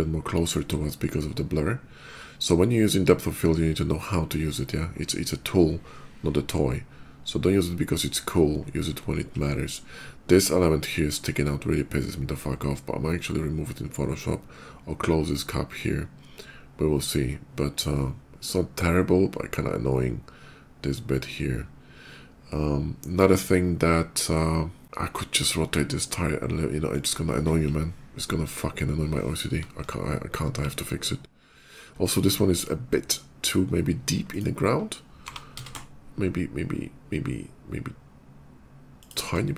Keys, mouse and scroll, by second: 26.7 click, 34.0 click, 35.2 g, 35.4 z, 38.8 shift+click.